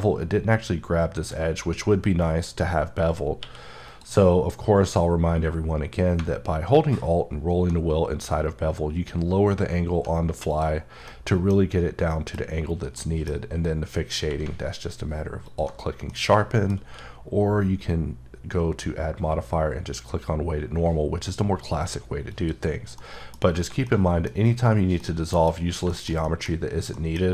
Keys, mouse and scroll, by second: 3.4 Num_Lock, 3.4 Caps_Lock, 3.4 q, 3.8 click, 6.6-7.1 alt+scroll down 6, 7.7 scroll down 1, 10.5 click, 10.7-11.1 scroll down 1, 11.1 middle click, 11.8-12.1 scroll up 1, 12.1 middle click, 12.4-13.0 scroll up 1, 13.0 middle click, 13.0 scroll down 1, 14.2 q, 15.5 alt+click, 16.1 middle click, 16.9 q, 22.3 click, 23.0 middle click, 23.8 middle click, 25.0 middle click, 25.5-25.9 scroll down 2, 25.9 shift+middle click.